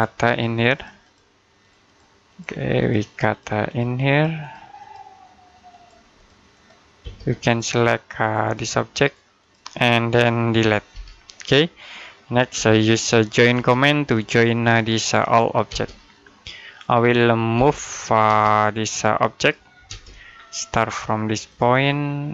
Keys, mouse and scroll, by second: 6.9 space, 7.3 click, 10.8 Delete, 11.8 middle click, 12.4 j, 13.4 space, 14.0 click, 15.5 space, 16.0 scroll down 1, 17.4 m, 18.1 space, 18.7 click, 19.7 space, 20.2-21.3 scroll up 1, 21.3 click, 21.6-21.9 scroll down 1, 21.9 middle click.